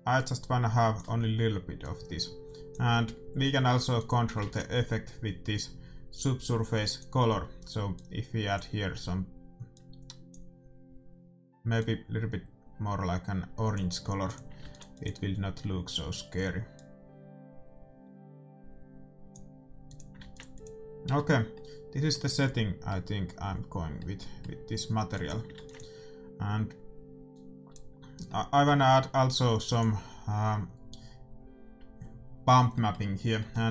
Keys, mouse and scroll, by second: 2.2-3.9 drag, 4.2-6.1 drag, 4.6 ctrl+s, 7.1-9.3 drag, 14.5-18.5 drag, 14.8 ctrl+s, 20.0-22.5 drag, 20.3 ctrl+s, 21.5-25.6 middle drag, 25.2 click, 25.6 ctrl+s, 29.7-31.1 drag, 31.1-32.3 middle drag, 32.8-33.7 middle drag.